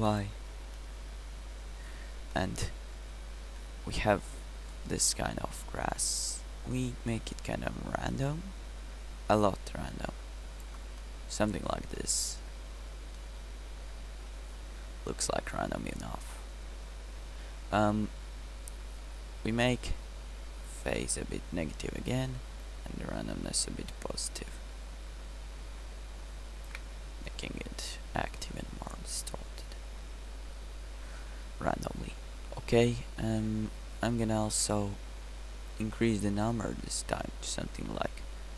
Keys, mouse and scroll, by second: 0.3-0.9 scroll up 1, 1.5 middle click, 2.8 middle click, 7.7-11.1 middle drag, 21.6-22.9 middle drag, 23.8 middle click, 24.5 middle click, 26.2-27.6 middle drag, 30.8 middle drag.